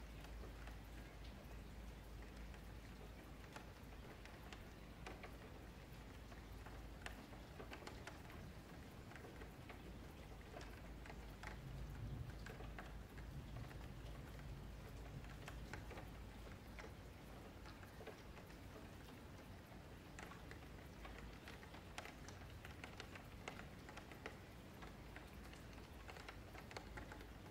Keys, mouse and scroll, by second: 0.2 F2, 0.9 F3, 3.3 click, 9.6-12.6 middle drag, 13.0 click, 13.8-15.2 middle drag, 15.2 shift+click, 16.0 ctrl+KP_Subtract, 16.7-17.2 scroll down 1, 17.2 scroll up 1, 17.3-21.8 middle drag, 21.8 click, 22.6-23.3 scroll down 9, 23.3-23.9 scroll up 12, 23.9-24.4 middle drag, 24.4-26.4 scroll down 1, 26.4-27.5 drag.